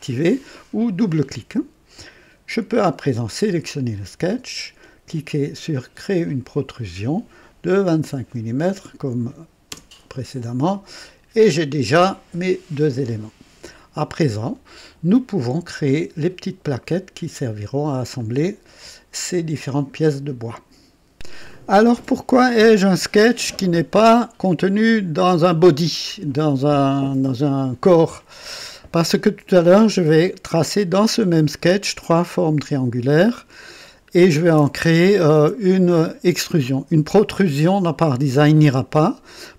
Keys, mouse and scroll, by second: 0.0 click, 0.9 click, 2.5 click, 6.2 click, 7.7 KP_2, 8.0 KP_5, 9.7 KP_Enter, 9.8 typing, 10.7-14.0 drag, 21.1 click.